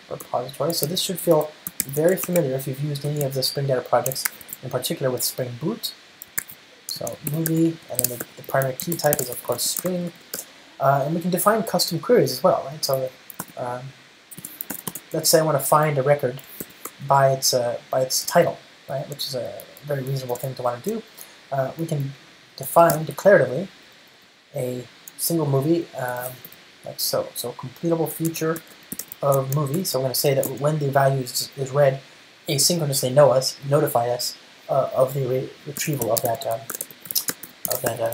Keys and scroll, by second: 1.1 super+z, 2.1 ctrl+space, 3.4 Return, 4.5 super+1, 9.0 alt+BackSpace, 13.8 ctrl+space, 16.9 ctrl+space, 17.5 super+n, 20.7 ctrl+shift+super+Up, 28.5 Return, 28.6 Return.